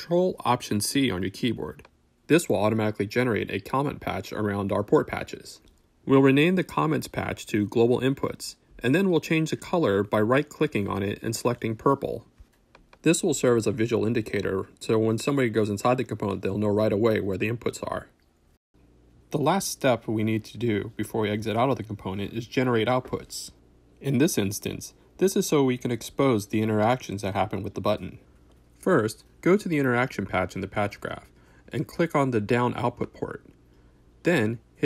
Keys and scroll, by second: 2.9 ctrl+alt+c, 5.4 shift+Return, 6.5-9.9 typing, 10.2 Return, 34.6 w.